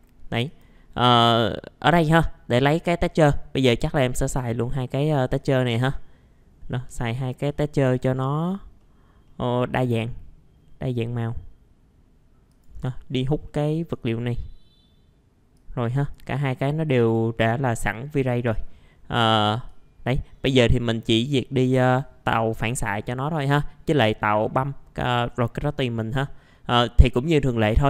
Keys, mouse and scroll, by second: 1.3 middle click, 4.4 click, 6.8 middle click, 7.5 click, 8.1 middle click, 8.4-8.7 scroll down 1, 8.8 middle click, 12.5 click, 17.0 click, 18.0 middle click, 18.6 scroll up 1, 19.6 click, 20.3-20.6 scroll up 1, 20.6 middle click, 21.1-21.5 scroll up 1, 21.5 click.